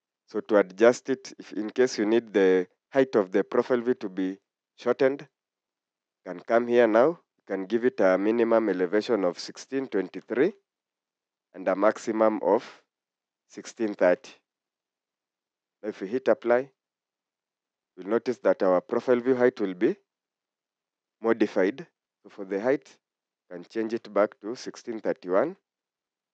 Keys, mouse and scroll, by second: 9.2-10.9 typing, 13.8-15.2 typing, 20.9-21.4 scroll down 1, 21.7 typing, 23.8-25.4 typing.